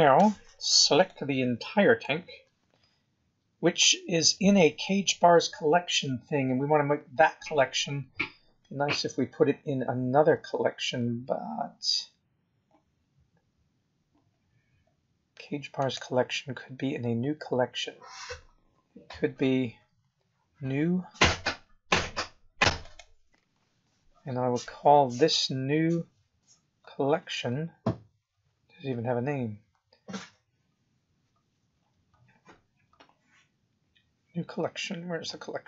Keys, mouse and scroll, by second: 0.1 b, 6.0 scroll down 2, 6.5 scroll up 2, 10.4 scroll down 5, 10.9-11.6 scroll up 8, 12.1-12.4 scroll down 2, 15.7 right click, 24.0-25.5 scroll down 25, 25.9-27.0 scroll down 18, 27.8-28.7 scroll up 9, 29.2 scroll up 2, 30.2-30.8 scroll up 3, 31.3-33.4 scroll up 23.